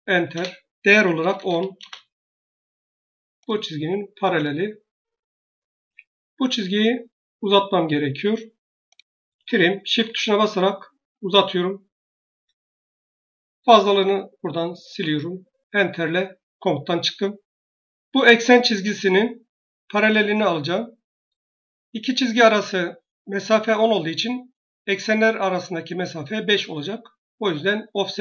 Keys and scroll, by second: 0.2 Return, 0.8-1.7 typing, 5.6 Escape, 16.4 shift+Return.